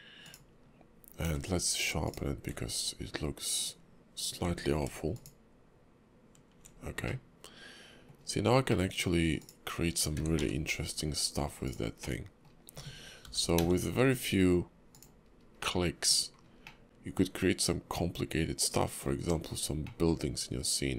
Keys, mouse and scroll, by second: 1.2 q, 3.5 click, 4.4 q, 6.8 scroll down 1, 7.0 middle click, 8.3 scroll down 2, 8.7 middle click, 9.4 click, 10.2 s, 12.0 middle click, 13.2 g, 15.3-15.6 scroll up 1, 15.6 middle click, 16.1-16.6 scroll down 3, 16.6 scroll up 1, 16.7 middle click, 19.3-19.8 scroll down 6, 19.8 middle click.